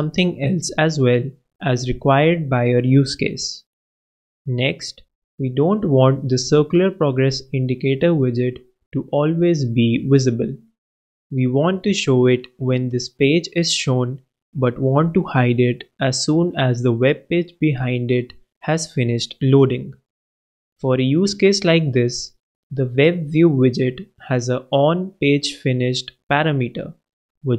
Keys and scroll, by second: 0.3 super+Return, 0.8 super+s, 2.7 super+BackSpace, 5.6 super+Return, 6.0 super+s, 16.7 super+Right, 18.2 super+,, 18.5 alt+super+l, 19.2 alt+super+Up, 19.6 super+Right, 20.1 super+Return, 20.9-21.8 typing.